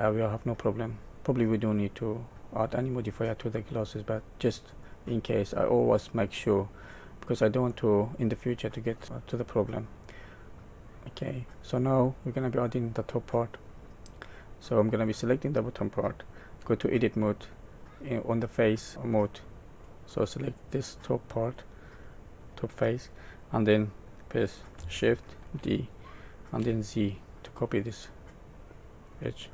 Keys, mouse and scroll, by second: 1.3 middle click, 2.8-3.8 scroll up 2, 3.8 middle click, 4.9-5.6 scroll down 2, 5.6 scroll down 1, 6.3 middle click, 7.7 middle click, 9.0 middle click, 13.7 middle click, 15.0 click, 16.6 Tab, 20.8 click, 25.4 shift+d.